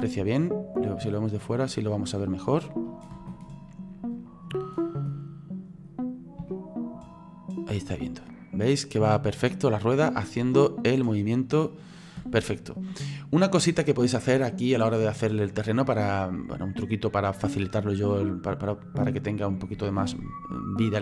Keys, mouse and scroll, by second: 1.7 scroll down 5, 2.5 scroll up 1, 3.1 space, 4.2 click, 4.9 space, 6.1 scroll up 3, 6.5-9.6 shift+middle drag, 10.7-11.0 scroll down 3, 12.2 space, 13.2 right click, 15.0 click, 16.1-17.8 middle drag, 17.8 click.